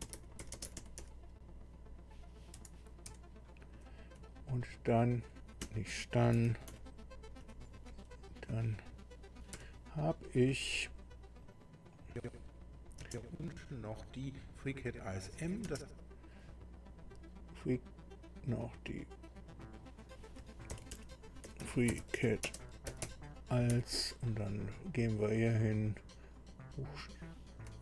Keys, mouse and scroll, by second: 0.0-1.6 typing, 3.0 BackSpace, 3.6 r, 4.1 Right, 4.8 Right, 5.2 Left, 5.6 Right, 6.3 d, 7.2 Delete, 8.5 Right, 9.5 n, 11.4 click, 11.9 click, 13.0 space, 16.0 space, 19.4 click, 20.4-23.7 typing, 25.1 click, 26.5 click.